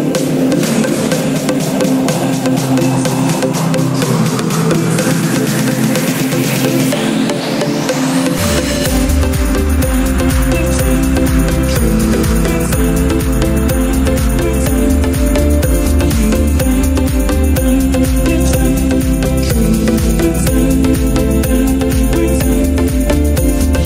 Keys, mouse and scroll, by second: 0.0 n, 0.9 click, 1.3-3.0 drag, 3.7 s, 4.1 1, 4.1 0, 4.4 0, 6.3 Return, 8.5-11.6 drag, 11.8 Return, 12.5 click, 16.2-17.5 drag, 18.6 z.